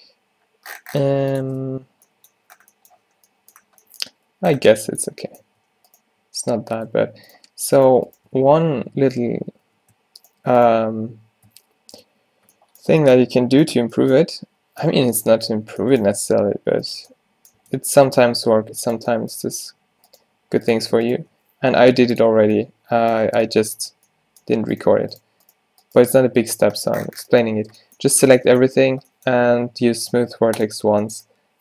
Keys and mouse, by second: 0.0 g, 1.5 Tab, 5.5 Tab, 8.5 q, 9.1 click, 9.6 ctrl+z, 10.3-12.1 drag, 11.6 q, 12.1 Tab, 15.7 Tab, 16.2 Tab, 17.0 Tab, 17.7 Tab, 18.0 Tab, 19.5 g, 21.4 g, 22.4 Tab, 23.3 Tab, 26.2 g, 26.5-27.8 right drag, 28.2 a, 28.4 a.